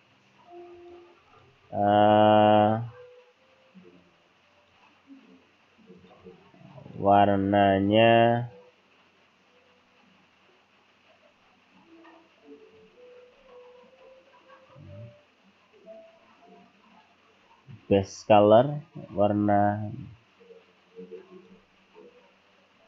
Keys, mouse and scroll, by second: 1.1 click, 1.3 click, 2.0 scroll up 2, 4.6 click, 6.0 click, 6.8 click, 7.8 scroll up 1, 12.8-13.3 scroll down 2, 13.3-13.9 scroll up 2, 18.1 click.